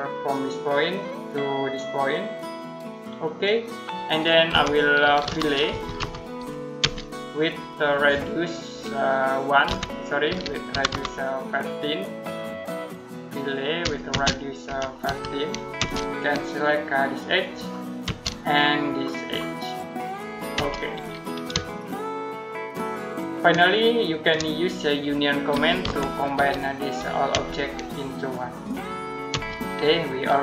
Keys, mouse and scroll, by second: 2.7 click, 4.3-6.6 typing, 8.5 Escape, 9.5-11.2 typing, 12.7 click, 13.7-15.6 typing, 17.3 click, 17.9 space, 19.7 click, 20.4 space, 21.5 shift+middle click, 25.4-27.2 typing, 27.9 click, 29.1 space.